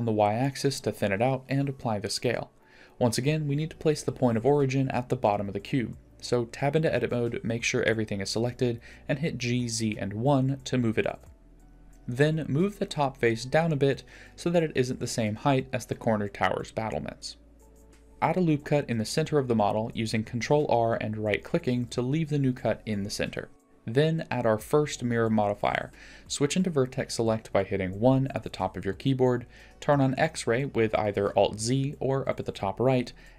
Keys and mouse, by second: 2.7 Tab, 3.6 click, 4.3 Tab, 5.2 ctrl+a, 7.3 click, 7.3 KP_1, 9.3 Tab, 10.1 g, 13.0-13.6 middle drag, 15.4 g, 17.6 click, 18.0 ctrl+r, 24.7-25.7 drag, 27.3 1, 31.3 click.